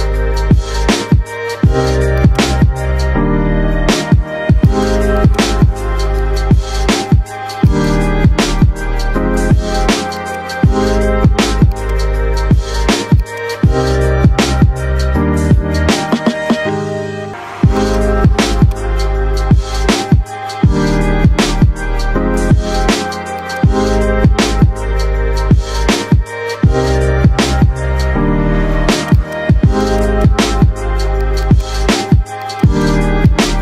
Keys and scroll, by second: 0.7 KP_Add, 1.6 F3, 3.1 ctrl+z, 15.3 ctrl+z.